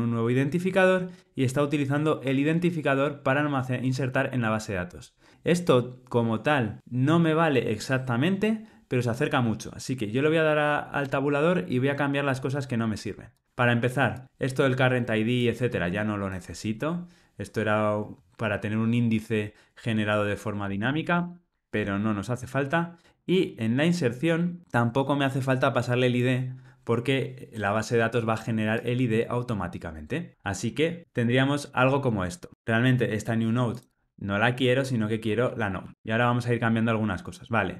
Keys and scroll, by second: 11.0 Tab, 34.2 ctrl+g, 35.9 Escape.